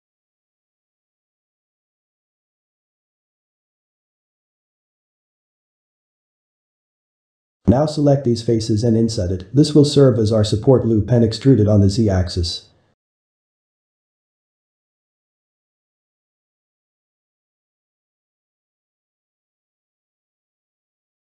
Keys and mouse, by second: 6.6 click, 8.3 shift+drag, 9.3 shift+click, 14.4-15.6 ctrl+shift+middle drag, 15.6 e, 19.2-20.8 ctrl+shift+middle drag, 20.8 g.